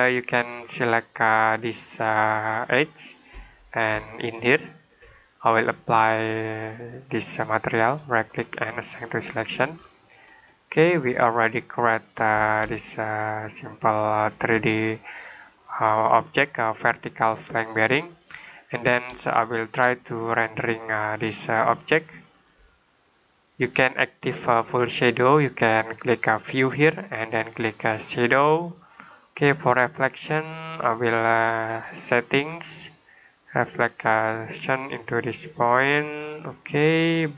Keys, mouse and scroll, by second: 2.2 click, 4.3 click, 7.8 right click, 8.7 click, 9.4 scroll down 1, 9.6-10.6 scroll up 1, 10.8 middle click, 12.5 middle click, 15.6 click, 18.3 middle click, 19.1 middle click, 22.5 middle click, 26.4 click, 33.6 click.